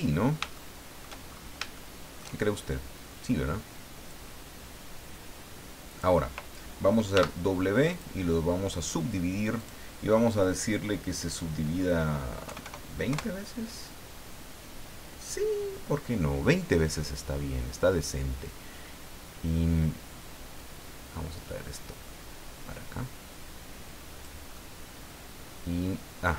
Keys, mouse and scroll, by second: 0.5 shift+middle click, 1.3-1.6 shift+scroll up 2, 1.7 shift+middle click, 4.1-6.2 drag, 7.1 w, 7.9 click, 9.6 click, 12.4 KP_2, 12.6 KP_0, 13.1 KP_Enter, 20.6-24.4 drag, 24.5-26.3 middle drag.